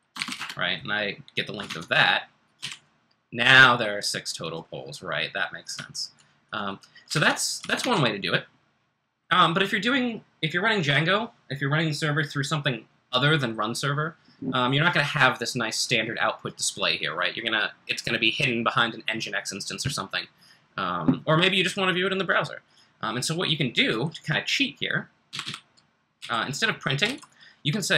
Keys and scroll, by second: 0.0-0.7 typing, 1.6 super+Tab, 2.3-3.1 typing, 7.1 super+Tab, 7.6 super+Tab, 7.8 super+Tab, 25.0-27.9 typing.